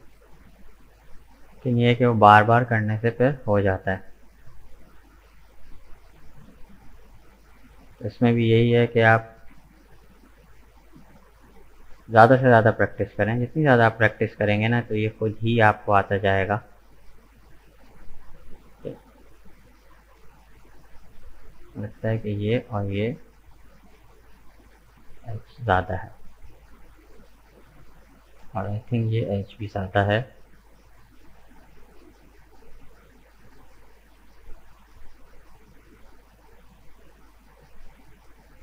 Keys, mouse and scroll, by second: 2.9-6.4 drag, 6.4 right click, 6.8-9.3 middle drag, 9.3 g, 13.6-16.7 middle drag, 17.0-19.0 middle drag, 19.0 click, 20.0 shift+middle click, 20.5-21.3 scroll up 1, 21.3-22.1 scroll up 1, 22.1 right click, 22.7 shift+right click, 23.9 Delete, 25.2-27.8 middle drag, 27.8 right click, 28.1-29.9 middle drag, 29.9 Delete, 31.0-36.1 middle drag, 37.5-38.6 middle drag.